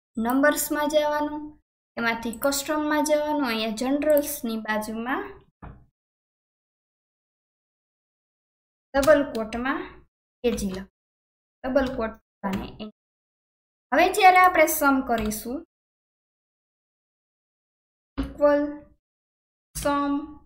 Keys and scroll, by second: 6.1 alt+KP_1, 9.0 shift+', 10.2-11.8 typing, 12.6 Return.